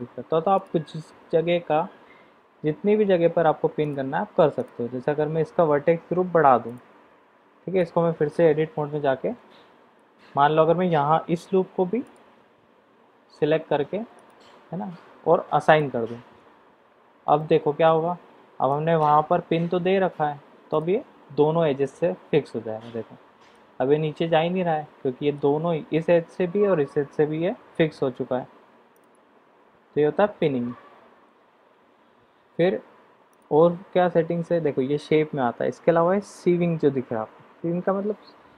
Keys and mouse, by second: 0.7 click, 3.9 drag, 4.5 click, 6.6 click, 7.8-8.3 middle drag, 9.0 Tab, 14.2 shift+click, 15.6 click, 16.6 Tab, 17.3-17.8 middle drag, 18.6-19.0 middle drag, 20.7 click, 23.7-25.5 middle drag, 33.2 click.